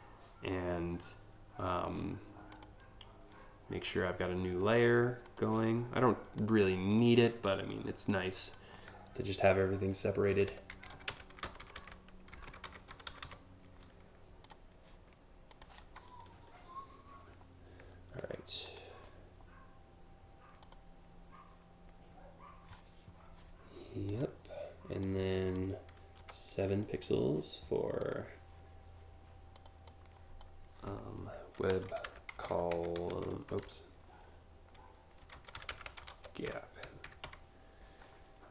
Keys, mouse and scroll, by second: 2.2 click, 3.5 click, 4.9 click, 6.0 click, 6.5 click, 7.1 click, 7.8 click, 9.9-13.4 typing, 14.1 click, 15.1 click, 18.3 click, 20.3 click, 23.7 click, 24.6 click, 27.6 click, 29.2 click, 29.5 click, 31.0-33.2 typing, 34.6-37.0 typing, 38.4 click.